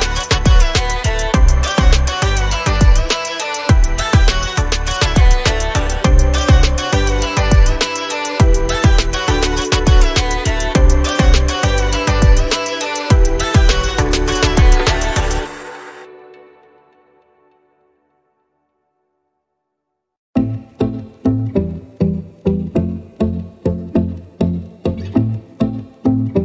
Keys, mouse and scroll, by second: 0.2 click, 9.5 alt+scroll down 1, 10.1 alt+scroll up 1, 10.2-11.7 alt+scroll down 1, 11.7 click, 16.0 click, 17.2 alt+scroll down 1, 17.5 alt+scroll up 1, 17.9 z, 19.7 click, 20.1 scroll down 1, 21.4 click, 23.3 ctrl+z, 25.0 click.